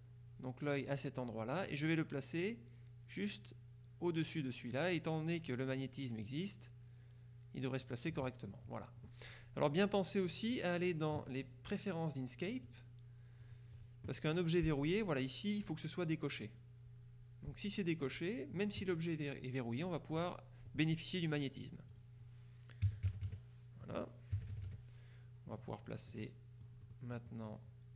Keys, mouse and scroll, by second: 6.3-8.7 drag, 10.4 click, 13.5 click, 22.0 click, 22.9 KP_Subtract, 23.9 click, 24.4 KP_Subtract, 25.7 middle click, 26.3 click, 26.9 click.